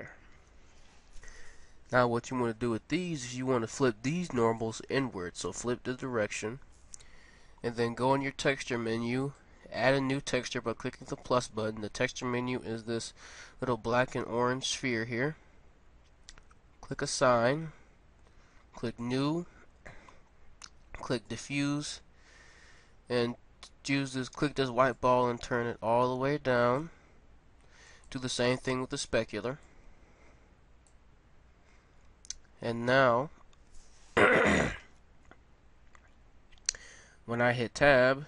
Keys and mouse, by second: 0.3-4.5 drag, 4.9-6.4 drag, 9.2-18.7 drag, 19.0-20.9 drag, 21.2-23.1 drag, 27.9-31.7 drag, 36.9 Tab, 37.8-38.2 middle drag.